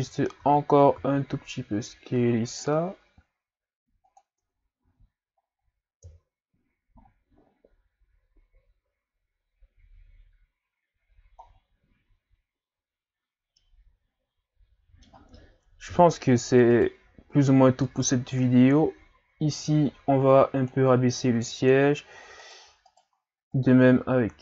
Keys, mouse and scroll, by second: 0.4 a, 1.0 s, 4.4 Tab, 4.8 a, 5.4-6.0 scroll down 1, 6.0 scroll down 1, 6.0 KP_3, 7.0 scroll up 3, 11.5-12.0 scroll down 1, 12.0-12.8 scroll up 2, 12.8-13.6 scroll up 1, 13.6-15.9 middle drag, 15.9 KP_3, 16.7 right click, 17.9-22.5 drag, 22.5 right click, 22.9 shift+right click, 23.5-24.4 drag.